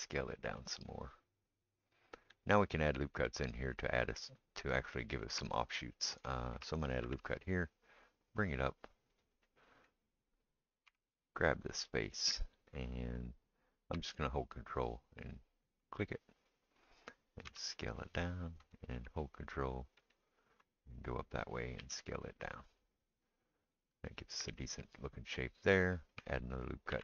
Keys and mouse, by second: 7.0 ctrl+r, 10.9 3, 11.0 click, 11.2-27.0 middle drag, 15.2 ctrl+right click, 17.5 s, 20.0 right click, 21.8 s, 26.9 ctrl+r.